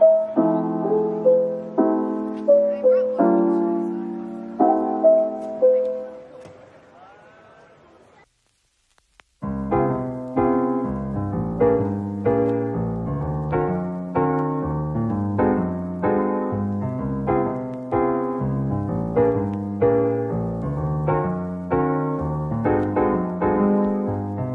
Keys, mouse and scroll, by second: 0.1 shift+click, 1.0 middle click, 2.5 typing, 4.5 typing, 6.1 scroll down 1, 6.3 middle click, 6.8 Tab, 8.2 Tab, 9.5 a, 9.9 right click, 12.6 Tab, 13.3 middle click, 17.0 scroll up 1, 17.4 middle click, 17.7 Tab, 18.9 middle click, 19.5 shift+click, 21.3 scroll up 1, 24.0 middle click.